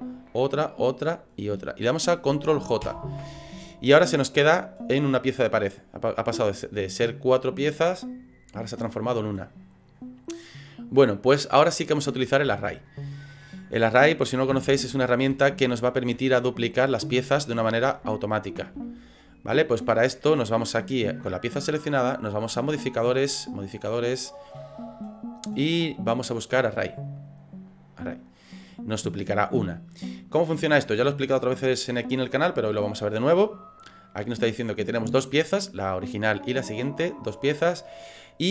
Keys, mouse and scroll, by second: 0.2 shift+right click, 1.0 right click, 1.5 shift+right click, 2.8 ctrl+j, 11.7-12.4 scroll down 9, 12.6 shift+middle click, 13.3 middle click, 14.5 KP_3, 15.1 scroll up 4, 15.4 shift+middle click, 16.4 ctrl+middle click, 17.4 shift+middle click, 18.1 ctrl+middle click, 18.8 shift+middle click, 22.6 click, 23.5 click.